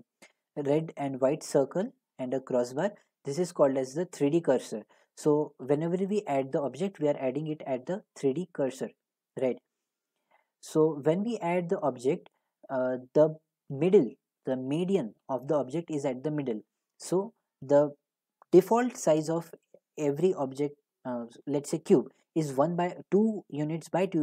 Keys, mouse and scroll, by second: 0.5-1.9 scroll, 4.8-5.8 scroll, 6.1 middle click, 10.7 middle click, 11.5 middle click, 15.8 middle click.